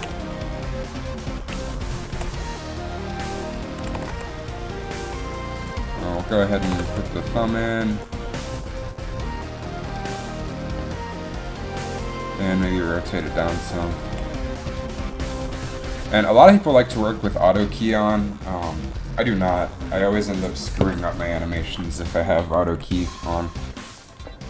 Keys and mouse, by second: 0.1 a, 1.3-3.6 drag, 2.3 r, 4.0 r, 6.8 r, 14.3 r, 20.9 KP_1, 20.9 KP_1.